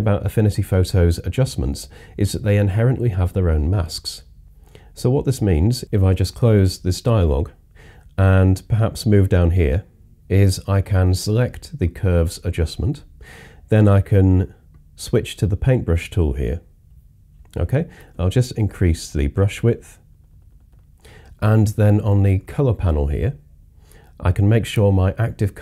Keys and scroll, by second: 18.0-18.8 typing.